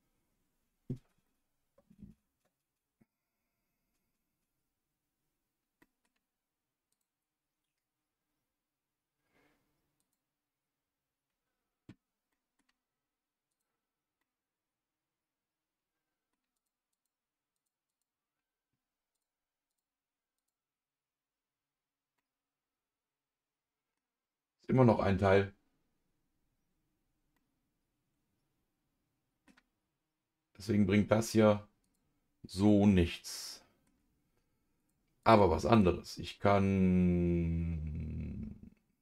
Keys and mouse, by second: 1.2-3.1 middle drag, 5.8 middle click, 6.9 click, 10.0 click, 12.3 middle click, 13.5 click, 14.2-16.3 middle drag, 16.9 click, 17.9 click, 19.1 click, 20.3 click, 22.1-23.9 middle drag, 27.3-29.4 middle drag, 31.8 click, 32.6-33.8 middle drag, 34.8 click, 35.2 click, 35.7-39.0 right drag.